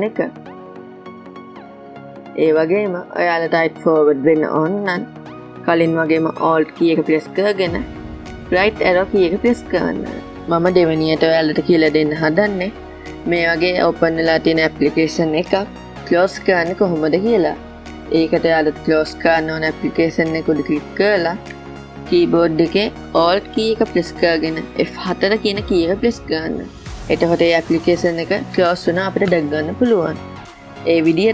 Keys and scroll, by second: 0.4 alt+Left, 9.4 alt+Right, 25.2 alt+F4.